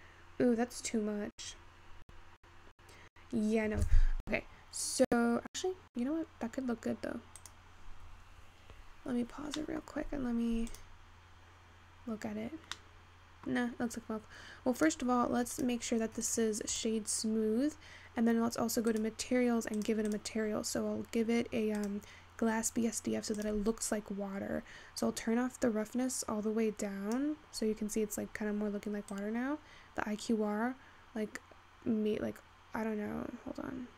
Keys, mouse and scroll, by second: 7.9-9.7 drag, 9.7-11.7 middle drag, 11.7 click, 12.4-12.9 scroll up 3, 12.9-13.6 middle drag, 13.6-14.9 scroll up 1, 14.9 click, 16.5-19.0 right drag, 19.0 click, 20.2-24.9 drag, 25.1-27.8 drag, 27.8-28.5 scroll up 3, 28.5-29.0 scroll down 1, 29.2-32.2 drag.